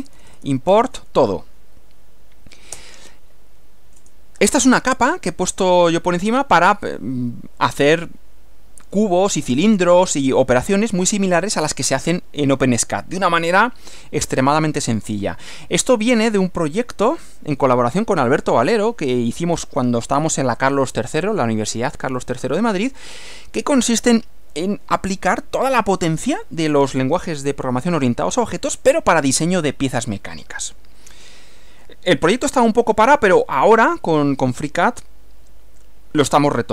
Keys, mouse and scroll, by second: 0.0-1.0 typing, 2.8 Return, 3.3 Up, 4.0 Return, 34.1 Return.